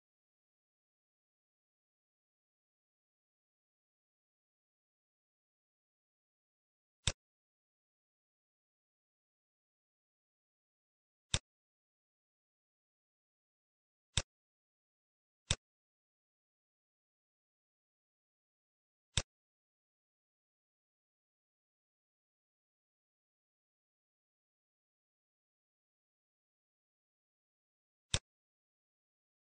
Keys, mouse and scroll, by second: 6.9 click, 15.4 click, 19.8-20.3 scroll up 2, 20.3 middle click, 20.6-21.4 scroll up 2, 21.4 middle click, 21.9 scroll up 1, 22.3 middle click, 24.1-24.8 scroll down 5, 24.8 middle click, 26.8 middle click, 27.1-27.7 scroll down 3, 28.0 click.